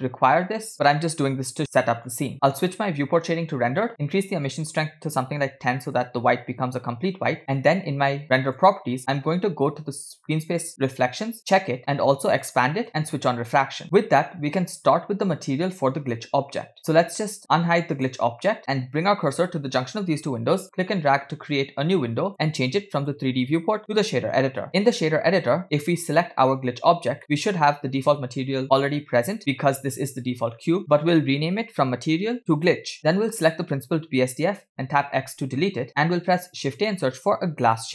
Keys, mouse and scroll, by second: 0.7 click, 0.9 middle click, 3.2 click, 4.0 click, 5.1-6.1 drag, 10.6 click, 12.1 click, 12.8 click, 14.1 click, 17.8 click, 18.3 click, 21.0-22.3 drag, 23.0-24.1 drag, 24.7 middle click, 24.9-26.0 scroll up 6, 25.8 click, 27.2 middle click, 27.4-28.0 scroll up 1, 30.6 scroll up 2, 30.8-33.0 drag, 35.4 x, 36.2 shift+a.